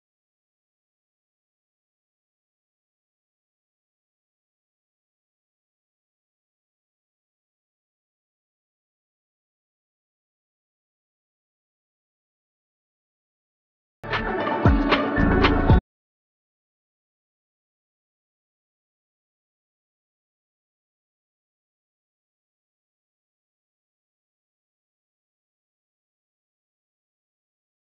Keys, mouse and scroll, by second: 0.0-3.5 drag, 3.8 scroll down 1, 4.2 scroll up 1, 4.8-7.7 drag, 8.0 scroll down 1, 8.3-8.7 scroll up 1, 8.7 scroll down 1, 9.1 scroll up 1, 9.9 scroll down 1, 10.0 scroll up 1, 10.2-12.7 drag, 12.9 scroll down 1, 13.1-13.5 scroll, 13.5 scroll up 1, 13.6 scroll down 1, 13.8 scroll up 1, 14.5-19.9 drag, 20.2 scroll down 1, 21.2 scroll up 1, 22.5 click, 23.8-24.4 scroll down 1, 24.4 scroll up 1, 25.2-25.5 scroll up 1, 25.5 shift+click, 25.8 right click, 26.2 scroll down 1, 26.3 scroll up 1, 26.5 scroll down 1, 26.6 scroll up 1, 26.9 right click, 27.2-27.9 scroll up 1.